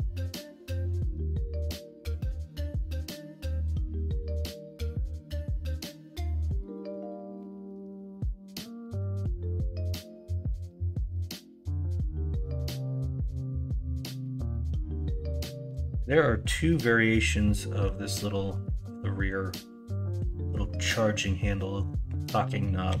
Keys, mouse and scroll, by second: 5.3 middle click, 10.9 middle click, 11.5 middle click, 12.0 shift+middle click, 12.8 KP_1, 13.2 KP_3, 22.8 KP_9.